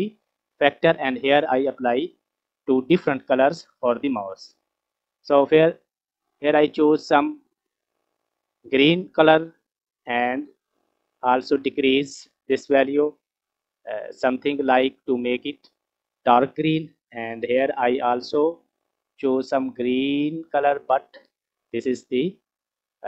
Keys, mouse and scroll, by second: 2.0-4.9 scroll up 2, 4.9 click, 15.6 drag, 16.3-16.6 scroll up 3, 16.6 middle click, 17.4 click.